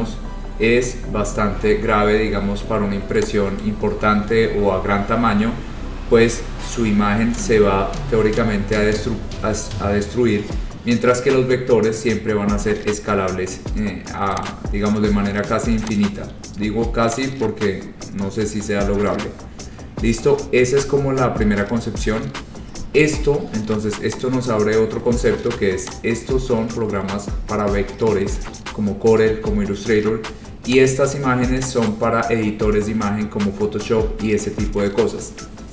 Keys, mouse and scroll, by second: 0.6 scroll, 1.4 scroll, 2.4 scroll, 3.7 click, 6.0-6.6 scroll, 7.7 scroll, 8.2 scroll, 10.5-12.3 scroll, 13.7-14.0 scroll, 14.6 click, 16.1 click, 16.7 scroll, 17.3 click, 23.1-23.9 scroll, 24.3 click, 24.6-25.1 scroll, 26.0 click, 30.2-30.8 scroll, 30.9 click, 32.0 click, 33.8 scroll, 34.6-35.2 scroll.